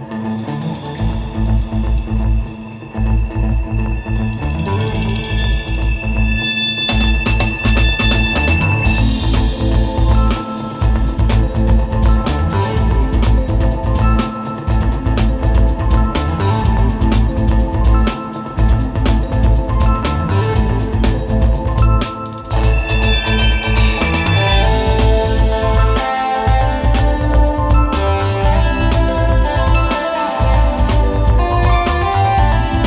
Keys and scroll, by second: 11.3 space, 12.6 alt+super+space, 12.7 super+", 12.9 super+Tab, 13.6 super+Tab, 17.1 space, 20.0 super+[, 23.2 super+z, 25.0 super+z, 25.1 space, 26.1 alt+super+space, 27.0 super+j, 27.4 super+z, 27.8 super+j, 28.9 space, 29.4 super+g, 30.3 space, 32.0 super+z.